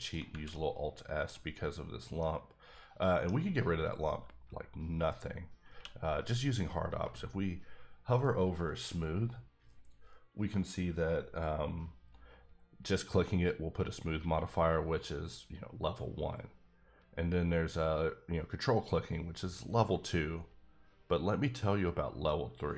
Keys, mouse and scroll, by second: 0.0 shift+click, 0.5 middle click, 2.2 middle click, 5.7 q.